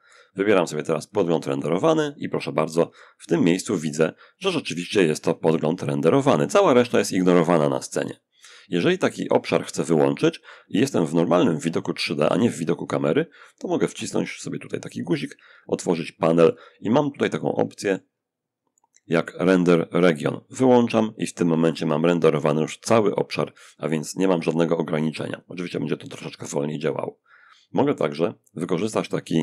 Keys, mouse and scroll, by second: 0.2 click, 13.0 n, 15.6-17.7 ctrl+middle drag, 19.8 click, 28.6 ctrl+b, 29.1 ctrl+click.